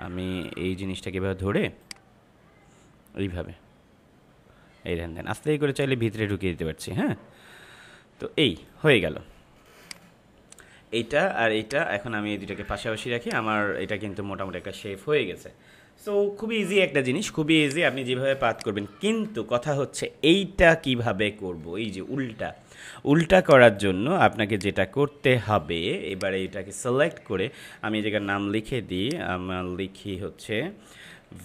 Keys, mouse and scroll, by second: 17.4 space, 17.6 click, 17.9 space, 18.5 click, 18.8 space, 23.1 space, 23.3 click, 23.6 space, 24.5-26.0 drag, 26.3 space, 28.1 t, 28.9 click, 29.9 ctrl+a, 31.0-31.4 typing.